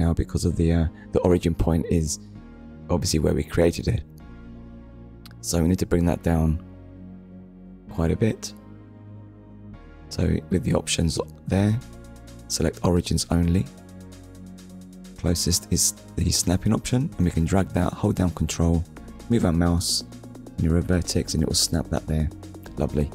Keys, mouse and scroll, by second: 0.7 click, 1.9 scroll up 1, 4.3 click, 11.0 click, 12.0 click, 13.5 click, 14.7 click, 16.8 click, 18.5 ctrl+click, 22.2 click.